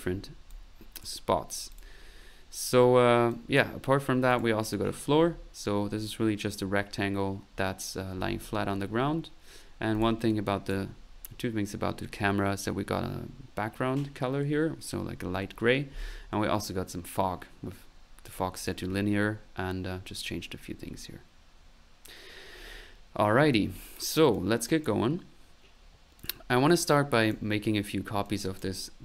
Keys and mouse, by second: 0.0 click, 0.5 click, 1.7 click, 3.3 click, 4.0 click, 4.8 middle click, 9.6 middle click, 9.9 click, 10.5 click, 18.3 click, 24.3-25.3 drag, 27.1 click, 28.3 click.